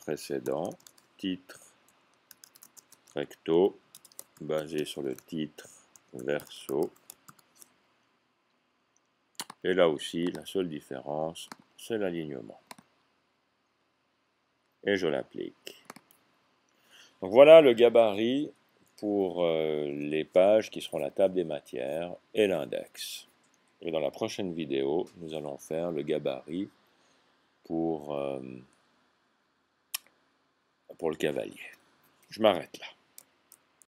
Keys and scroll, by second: 0.4-3.1 typing, 4.4-7.2 typing.